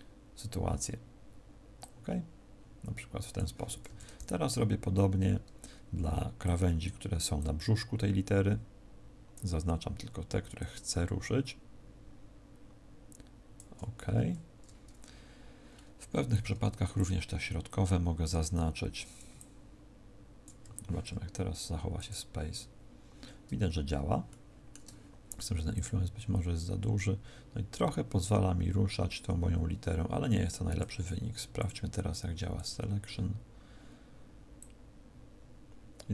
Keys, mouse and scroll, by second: 1.7 click, 15.4 scroll down 2, 15.6-16.3 scroll up 5, 16.3 c, 21.8 click, 24.2 shift+middle click, 25.6 click, 31.5 click, 34.4 click.